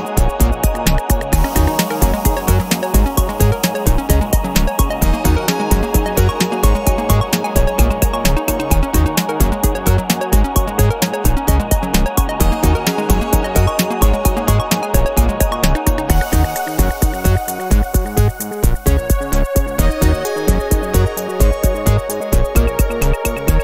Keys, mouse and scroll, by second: 0.8-3.3 scroll up 1, 3.3-3.8 scroll up 1, 3.8 0, 4.4 scroll down 1, 5.6 click, 7.1 space, 8.3 space, 8.9 click, 9.3 space, 10.8 click, 11.2 space, 13.0 click, 14.2 click, 16.2 click, 17.2 click, 18.4 click, 19.4 click, 20.8 5, 21.2 0, 22.3 click, 23.2 1.